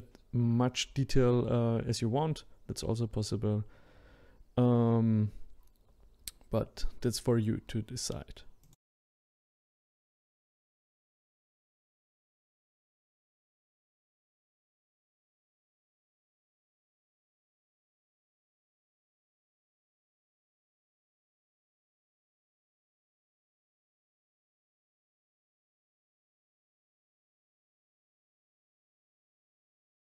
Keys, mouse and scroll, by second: 1.8-3.4 drag, 3.4 scroll up 3, 3.5 shift+middle click, 3.6 click, 4.2 click, 4.7 click, 5.3 click, 6.0 click, 7.1 click, 7.6 click, 8.2 scroll down 3, 8.2 shift+middle click, 8.7 click, 9.6 scroll up 2, 9.7 shift+middle click, 9.9 click, 10.1 scroll up 1, 10.2 shift+middle click, 10.4 click, 10.9 ctrl+click, 11.2 scroll down 4, 11.2 shift+middle click, 11.6-13.5 ctrl+drag, 13.6 click, 13.9 shift+middle click, 14.1 click, 15.0 ctrl+click, 15.5 ctrl+click, 15.8 shift+middle click, 16.0 ctrl+click, 16.4 shift+middle click, 16.5 scroll up 4, 16.6 click, 17.2 middle click, 17.4 click, 17.6 scroll down 3, 17.7 middle click, 18.0 click, 18.4 middle click, 18.8 click, 19.3 scroll down 3, 19.3 shift+middle click, 19.5 click, 20.0-21.5 drag, 21.5 scroll down 3, 21.5 scroll up 1, 21.7 click, 21.8 middle click, 21.9 scroll down 1, 22.1 middle click, 22.5 a, 22.7 a, 22.9 middle click, 23.8 click, 24.3 middle click, 24.7 click, 24.8 middle click, 25.0-25.4 scroll up 2, 26.0 Tab, 26.0 middle click, 26.2 scroll up 2, 26.2 scroll down 1, 26.3 middle click, 26.8 click, 28.6 scroll down 1, 28.7 middle click, 29.0 click, 29.1 middle click, 29.3 click, 29.4 shift+middle click, 29.7-30.1 scroll up 1.